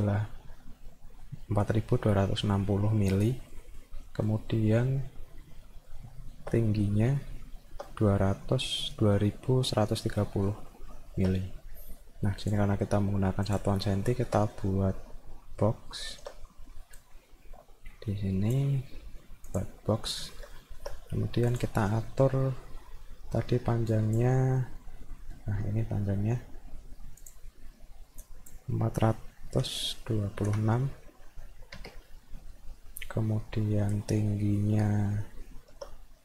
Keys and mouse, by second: 3.5 middle click, 4.1 middle click, 5.5 middle click, 5.9 alt+middle click, 6.6 middle click, 7.0 alt+middle click, 10.5 middle click, 10.9 alt+middle click, 12.4 click, 13.5 click, 14.0 alt+middle click, 15.5 middle click, 15.9 alt+middle click, 17.0-18.5 drag, 19.5 click, 20.6 alt+middle click, 21.5 click, 23.9 click, 25.2 middle click, 27.2 click, 28.2 click, 34.6 middle click, 34.9 alt+middle click.